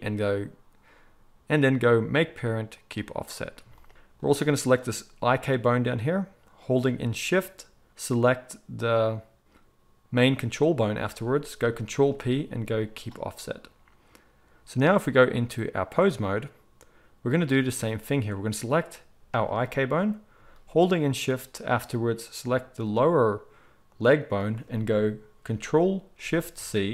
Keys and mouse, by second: 4.5 click, 4.7-10.1 middle drag, 10.1 shift+click, 10.3-15.2 shift+middle drag, 11.9 ctrl+p, 15.2-18.6 drag, 18.6-22.3 middle drag, 22.3-22.7 shift+drag, 22.7-26.5 middle drag.